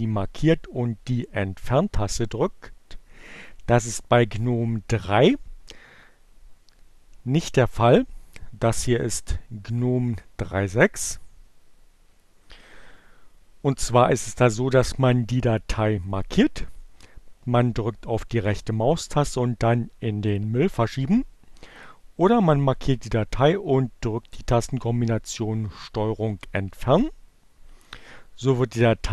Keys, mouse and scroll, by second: 0.2 Delete, 15.6 right click, 20.5 click, 21.3 click, 25.7 ctrl+Delete.